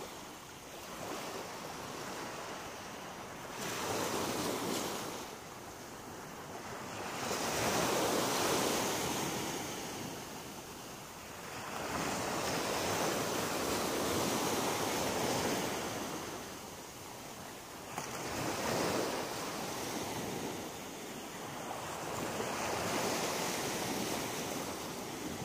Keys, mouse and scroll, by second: 0.8 scroll down 2, 1.2 middle click, 2.0 shift+middle click, 2.7 middle click, 3.5-4.0 scroll up 5, 7.1 click, 8.1 right click, 8.7 shift+right click, 9.3 right click, 9.8 shift+right click, 11.2 shift+right click, 11.6 middle click, 12.8 shift+right click, 13.1 shift+right click, 13.6 middle click, 14.0 scroll down 3, 14.7 shift+middle click, 15.8 middle click, 17.0-17.4 scroll down 1, 17.6 middle click, 19.5 shift+middle click, 20.5-20.9 scroll up 2, 20.9 middle click, 22.0 scroll up 2, 24.8 right click, 25.3 shift+right click.